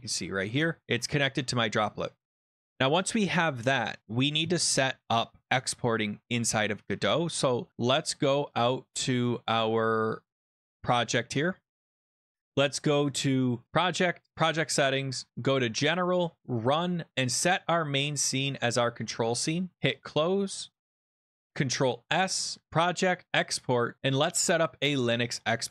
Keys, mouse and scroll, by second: 0.5-1.3 scroll, 2.4 click, 2.9 click, 3.0 click, 10.4 click, 10.5 click, 13.7 click, 13.9 click, 14.4 click, 15.5 click, 16.4 click, 17.2 click, 18.3 click, 18.4 click, 19.9 click, 21.0 click, 21.3 click, 21.8 ctrl+s, 22.6 click, 23.3 click, 24.5 click.